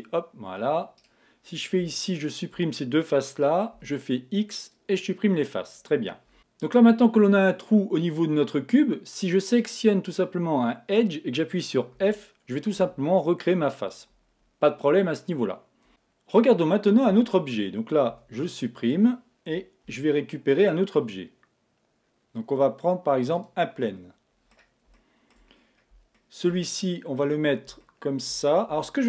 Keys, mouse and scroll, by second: 1.0-5.1 right drag, 4.0 x, 9.5-12.0 right drag, 12.0 f, 17.1 Tab, 18.1 x, 19.9 shift+a, 23.9-29.0 middle drag, 28.7 Tab.